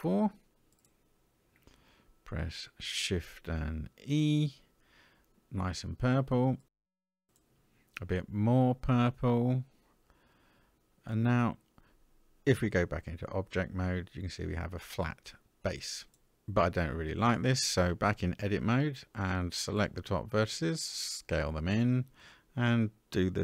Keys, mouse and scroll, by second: 0.7 alt+click, 3.4 shift+e, 6.7 shift+e, 10.0-11.4 middle drag, 12.2 Tab, 12.7-13.8 middle drag, 13.9-14.6 scroll down 2, 14.6-15.2 scroll down 1, 15.2-15.8 middle drag, 16.5 Tab, 18.4 alt+click, 19.7 s, 21.5 Tab, 22.0-23.4 middle drag.